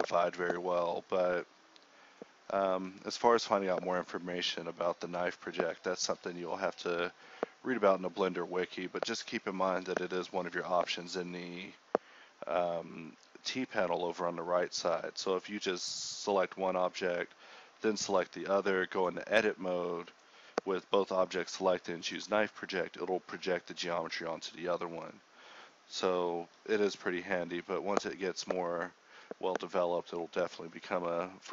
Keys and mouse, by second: 0.6-2.2 typing, 5.6-8.5 typing, 9.1 Tab, 9.4-10.8 drag, 10.8 KP_7, 12.1 right click, 12.2 Tab, 12.5 g, 12.8 click, 12.9 z, 13.0 Tab, 13.1 KP_1, 13.6 Tab, 15.1 k, 17.8 g, 18.0-20.0 right drag, 18.7 click, 20.0 f, 20.3 right click, 20.5 ctrl+r, 21.2 a, 21.5 k, 23.5 middle click, 23.7 middle click, 24.3-28.2 typing, 25.2 middle click, 25.5 Tab, 26.3 Tab, 26.8 Tab, 28.1 click, 28.9 middle click, 29.7 z, 30.0 a, 30.6 k.